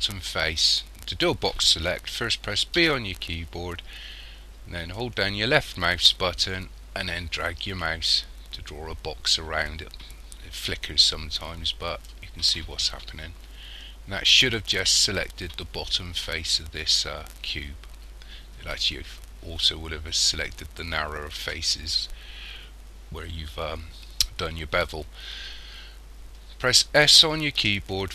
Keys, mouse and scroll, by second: 2.8 b, 27.6 s.